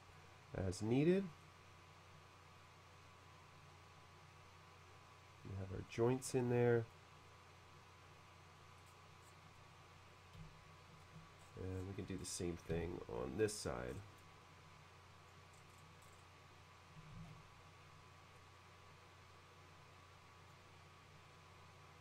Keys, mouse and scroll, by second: 1.5-5.9 drag, 6.3-7.0 middle drag, 8.8 middle click, 8.9 scroll down 1, 9.4 scroll down 1, 9.6-11.0 middle drag, 11.4-12.0 scroll up 4, 12.2-12.5 scroll down 2, 12.8 b, 13.5-13.8 scroll up 2, 13.9 middle click, 14.3-15.3 drag, 15.5 middle click, 16.0 middle click, 17.2 ctrl+z, 18.4-20.5 drag.